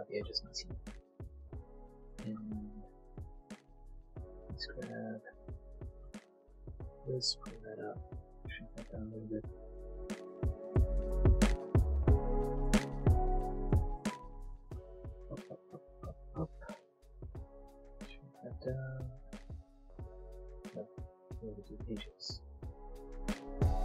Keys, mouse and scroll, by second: 0.3 shift+middle click, 0.9 middle click, 1.3 middle click, 1.8 click, 2.1 middle click, 2.5 shift+click, 2.7 shift+click, 3.7 shift+click, 4.2 shift+click, 4.8 shift+click, 5.7 middle click, 5.8 middle click, 6.3 shift+click, 7.0 shift+e, 7.5 click, 7.9 s, 8.4 click, 8.5 Tab, 8.7 middle click, 9.2 Tab, 10.5 click, 11.4 alt+click, 11.9 alt+click, 12.6 click, 14.0 middle click, 15.6 shift+click, 16.0 shift+click, 16.2 shift+click, 16.6 middle click, 16.7 middle click, 16.9 shift+s, 17.1 x, 18.5 click, 18.7 scroll, 21.7 click, 22.3 alt+click, 22.6 alt+click, 22.7 click, 23.0 alt+click.